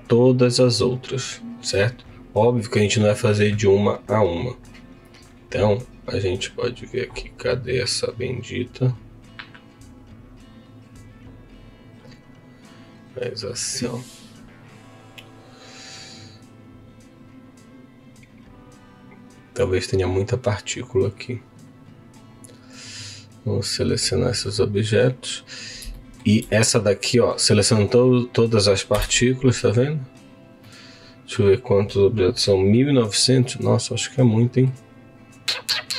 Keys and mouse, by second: 0.0 click, 15.0-20.8 drag, 21.6 click, 22.1-24.0 drag, 25.9 shift+middle click, 28.9 KP_Decimal, 30.7-31.8 middle drag, 33.6-35.1 middle drag.